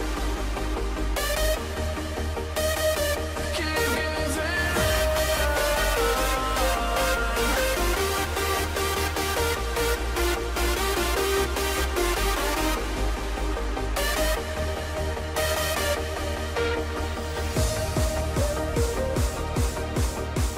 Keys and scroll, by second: 0.8 ctrl+=, 1.7 ctrl+-, 2.5 ctrl+0, 2.8 ctrl+=, 7.0 ctrl+-, 15.7 ctrl+t, 18.6 ctrl+alt+z, 19.3 ctrl+t.